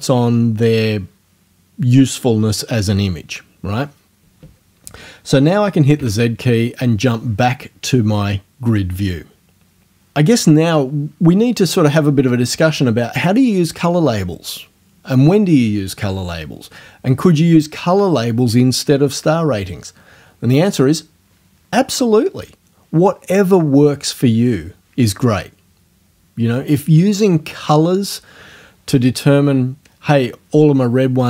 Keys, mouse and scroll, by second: 6.0 z.